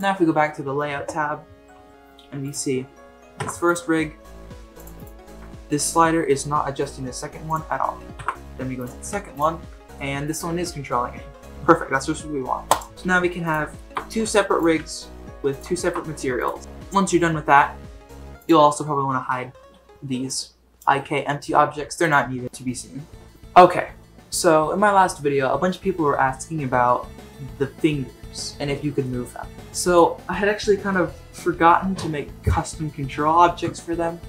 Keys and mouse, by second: 3.4 ctrl+Tab, 3.6 click, 3.9 g, 4.9 click, 5.3 g, 8.1 ctrl+Tab, 9.1 ctrl+Tab, 9.3 click, 9.6 g, 12.9 ctrl+Tab, 12.9 g, 13.7 shift+middle drag, 14.2 ctrl+Tab, 14.8 g, 15.7 shift+middle click, 16.1 ctrl+Tab, 16.3 click, 20.2 click, 29.0-29.9 middle drag.